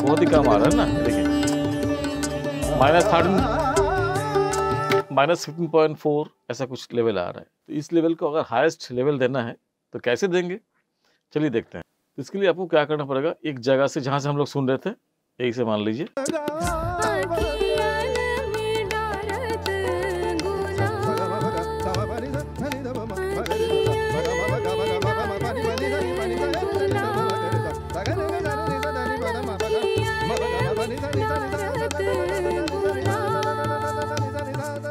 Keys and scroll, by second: 4.9 space, 16.0 space.